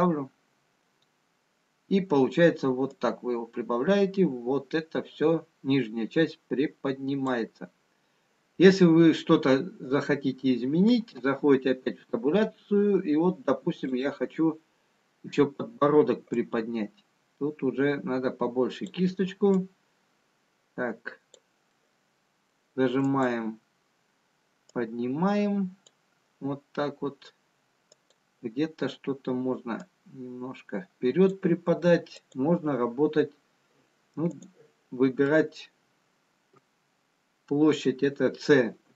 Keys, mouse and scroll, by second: 2.3 middle click, 4.5 click, 10.0-14.7 scroll down 2, 14.8 click, 14.8 scroll down 1, 16.5 click, 20.3 click, 21.6 scroll down 1, 24.1 middle click, 24.1 click, 27.2 click, 28.6 click, 31.2 click, 32.6 click, 35.5 click, 35.5 middle click.